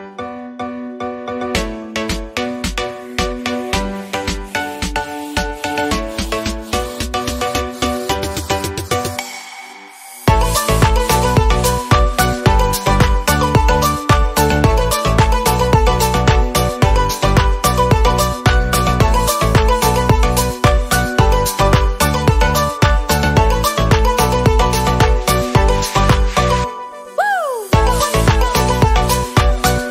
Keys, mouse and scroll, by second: 1.7-2.2 scroll down 1, 2.2 KP_0, 2.9-3.6 scroll up 1, 3.6 click, 4.1-4.9 scroll down 4, 4.9 middle click, 5.4-6.2 scroll down 7, 6.2 middle click, 6.4-9.9 scroll up 1, 9.9 click, 10.5 middle click, 11.1-11.5 scroll up 1, 11.5 scroll down 2, 11.7 middle click, 12.0 scroll up 1, 12.2 shift+middle click, 12.6 scroll up 1, 12.9 shift+middle click, 13.5 click, 14.1-18.0 drag.